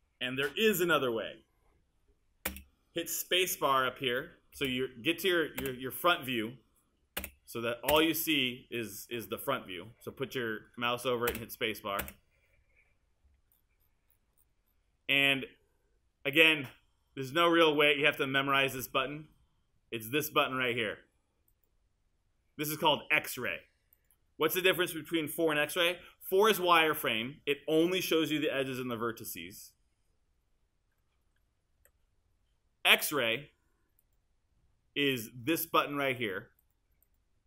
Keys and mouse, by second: 2.5 space, 11.3 space, 26.6 4, 31.8 5.